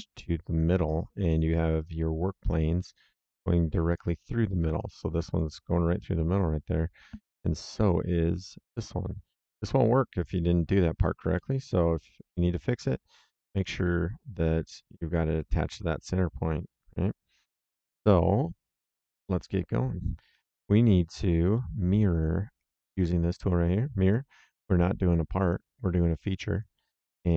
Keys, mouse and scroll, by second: 2.4 click, 3.8 click, 4.4 middle click, 5.1 click, 7.4 right click, 8.6 click, 9.5 middle click, 10.3 right click, 11.3 middle click, 13.5 click, 18.8 click, 19.3 middle click, 20.3 click, 21.5 middle click, 24.0 click, 25.4 click, 26.5 click.